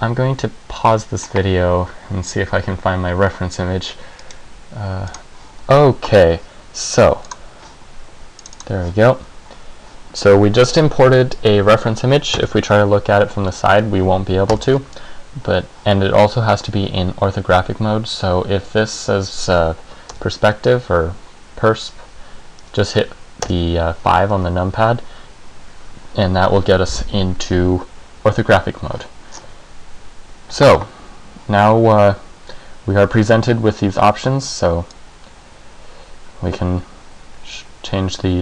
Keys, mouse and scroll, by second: 8.8 click, 12.5 KP_3, 14.6 KP_1, 20.2 KP_5, 23.6 KP_5, 29.5-31.3 scroll down 2, 31.3 scroll down 3, 35.1 click.